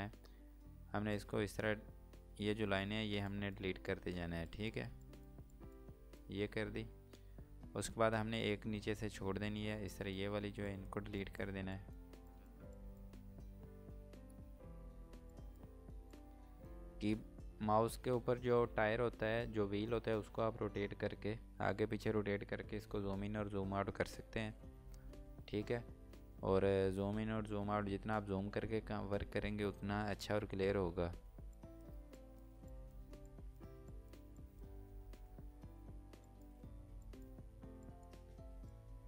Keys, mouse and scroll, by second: 2.0 scroll up 1, 3.4 click, 6.1 scroll down 1, 6.9 scroll up 1, 9.9 scroll up 1, 10.0 click, 13.8 scroll up 1, 15.3 click, 17.1 scroll down 1, 18.7 scroll up 1, 19.9 scroll down 1, 21.2 scroll up 1, 25.0 scroll down 1, 26.3 scroll up 1, 26.9 scroll down 1, 27.5 scroll up 1, 30.7 scroll up 1, 35.4 scroll up 1, 36.3 click.